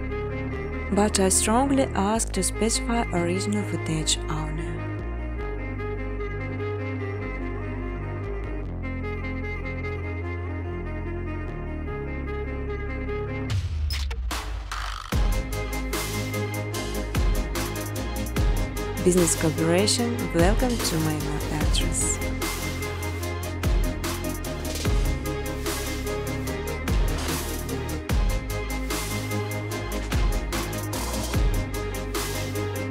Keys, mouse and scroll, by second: 1.6 alt+click, 2.2 ctrl+v, 3.9 click, 5.2-8.6 typing, 5.6 click, 8.5 click, 10.6 space, 10.9 scroll, 10.9 space, 11.4 space, 13.1 click, 13.2 space, 14.5 space, 14.9 middle click, 14.9 middle click, 14.9 middle click, 15.1 middle click, 15.1 middle click, 15.4 middle click, 15.4 middle click, 16.0 click, 19.5 scroll, 19.9 right click, 20.6 click, 21.6 click, 22.7-23.9 typing, 25.5 click, 25.7 click, 26.9 click, 27.4-29.9 typing, 30.6 Return.